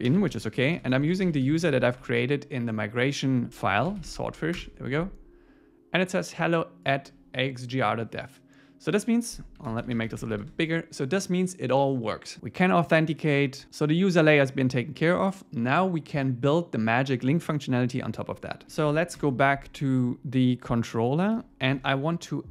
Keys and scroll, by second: 0.8 alt+l, 2.0 Tab, 9.7 super++, 10.3 super++, 19.2 Return, 20.0 super+1, 21.3 super+1.